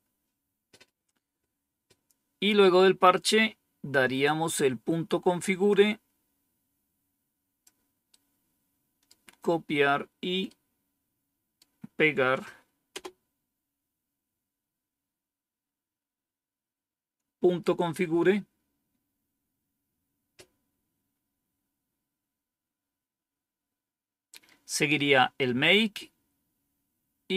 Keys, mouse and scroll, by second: 5.6 click, 8.0 right click, 10.4 right click, 12.8 Return, 21.9-23.0 scroll down 3, 25.9 scroll down 2, 26.8-27.3 scroll down 2.